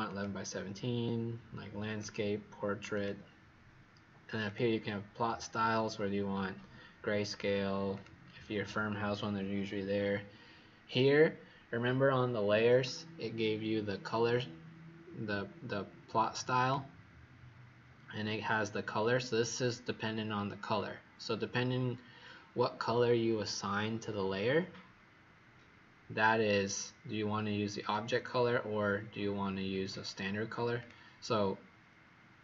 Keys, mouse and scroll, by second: 0.0 click.